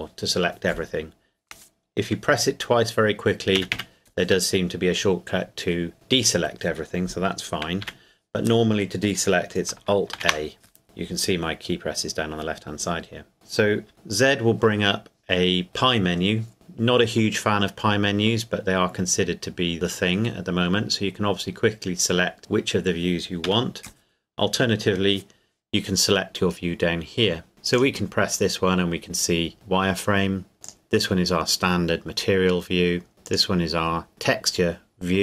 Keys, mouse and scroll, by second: 3.6 typing, 7.8 a, 10.1 alt+a, 13.9 z, 23.4 Escape, 27.7 click, 29.5 scroll up 1, 30.3 scroll down 1, 30.5 scroll up 1, 30.6 click, 31.9-32.4 scroll down 1, 33.3 click.